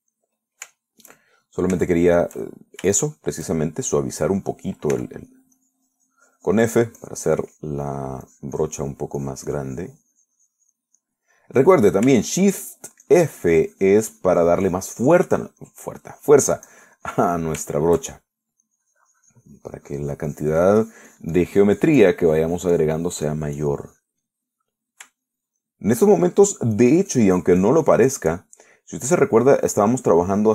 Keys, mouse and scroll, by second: 0.3-1.3 drag, 1.3 middle click, 2.0-3.0 shift+middle drag, 3.1-4.8 shift+middle drag, 5.2 middle click, 6.2 f, 6.5 click, 6.8-9.1 drag, 9.2 middle click, 9.5 click, 10.4-12.2 drag, 12.3 middle click, 12.9 middle click, 13.5 shift+middle click, 14.3-17.1 drag, 17.4-18.6 drag, 19.0 shift+middle click, 19.9-25.1 shift+drag, 25.6 middle click, 26.5 shift+middle click, 27.4 shift+middle click, 28.0-29.8 shift+drag, 29.9 middle click, 30.4-30.5 drag.